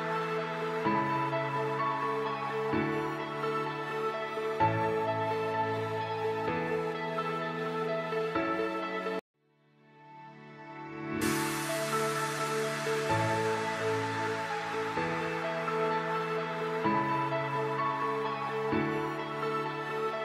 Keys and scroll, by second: 11.5 Escape, 14.5 Escape, 16.6 F4, 17.4 Escape.